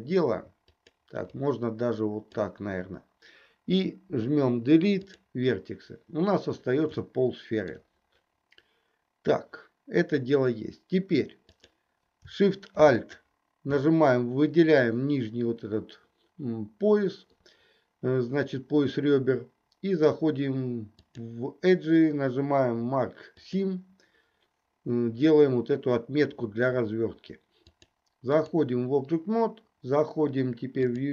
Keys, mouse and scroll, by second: 0.8 click, 1.4-2.4 drag, 4.1 Delete, 7.1 shift+middle click, 11.6 click, 13.1 alt+shift+click, 21.0-23.6 drag, 27.8 click.